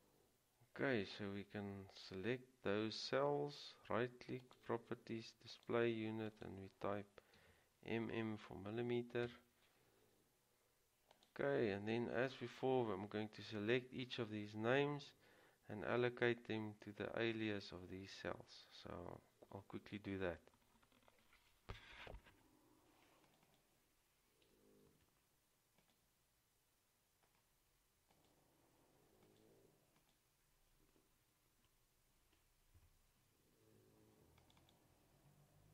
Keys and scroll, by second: 7.5 typing, 9.4 Return, 25.0 ctrl+c, 31.7 ctrl+v, 33.0 Return.